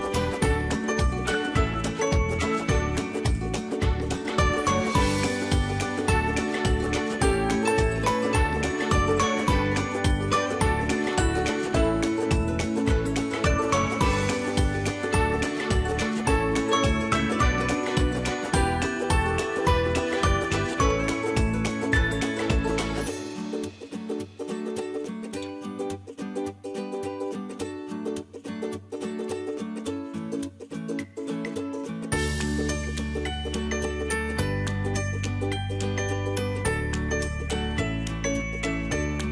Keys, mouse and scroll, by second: 0.3 alt+click, 0.9-1.5 typing, 2.3-3.6 drag, 3.6 right click, 5.0 click, 6.1 space, 7.0 ctrl+space, 9.1-13.7 drag, 13.7 space, 13.9-17.8 ctrl+drag, 17.8 space, 18.0 click, 18.3 space, 18.5 click, 18.6 space, 20.0-21.9 drag, 21.9 space, 22.3 click, 22.5 space, 22.7 click, 23.7-27.7 alt+drag, 27.7 space, 27.9 click, 28.2 space, 29.2-32.0 drag, 32.0 space, 32.3 click, 32.5 space, 33.5-35.7 drag, 35.7 space, 36.0 click, 36.2 space, 36.7 click, 36.9 space, 37.4-39.3 drag.